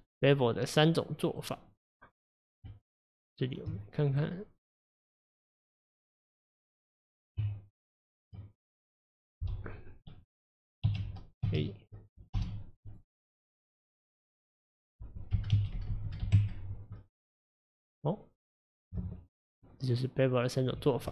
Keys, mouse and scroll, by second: 0.0-2.7 middle drag, 2.7 Tab, 4.2 middle click, 5.1-5.7 scroll up 3, 5.7-7.4 middle drag, 7.4 Tab, 10.9 1, 11.5 a, 12.4 m, 14.9-15.9 drag, 15.9 KP_0, 16.1 KP_0, 17.4 drag, 17.7-20.6 middle drag, 20.6 click.